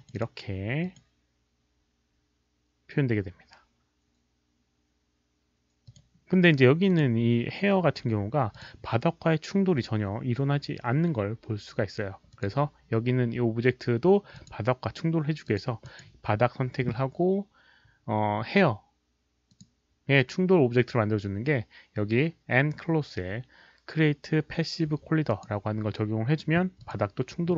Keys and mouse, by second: 0.8 alt+click, 5.8 click, 6.8 click, 8.5 click, 9.1 click, 9.1 q, 10.8 click, 12.3 click, 14.3 click, 15.4 click, 15.8 click, 19.5 click, 25.2 click, 26.7 click.